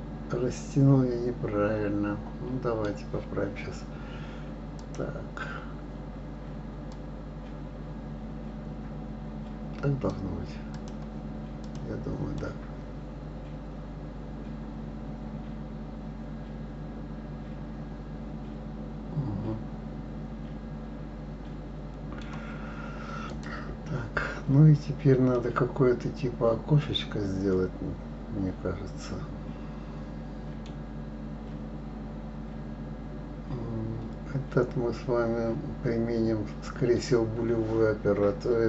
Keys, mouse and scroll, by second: 4.8 click, 6.9-10.0 drag, 10.7 click, 11.6 click, 12.3-15.4 middle drag, 23.3 click, 24.4 scroll down 2, 25.3-28.3 middle drag, 29.1-31.0 scroll down 1, 31.0-31.6 scroll down 1, 31.6-34.1 scroll up 2.